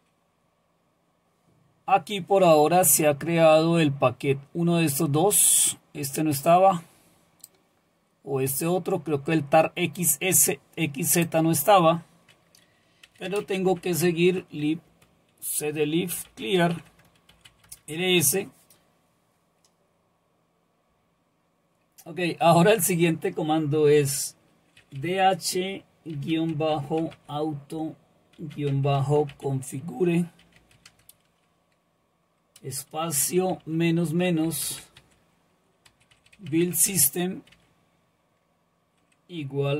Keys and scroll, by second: 12.8-14.5 typing, 14.9 Return, 15.9-17.8 typing, 24.5-31.4 typing, 32.6-37.5 typing.